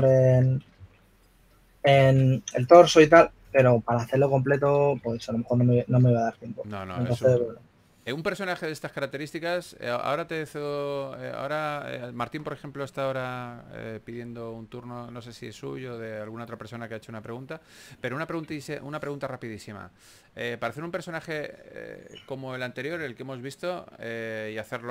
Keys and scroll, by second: 0.0-3.0 typing, 6.2 s.